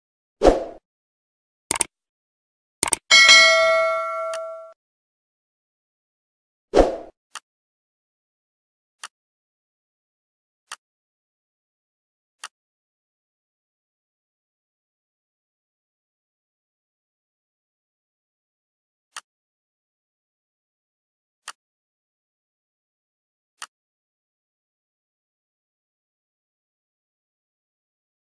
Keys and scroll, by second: 1.1 ctrl+c, 2.0 ctrl+v, 5.8 r, 9.8 l, 14.6 ctrl+c, 15.3 ctrl+v, 20.0 l, 24.8 ctrl+v.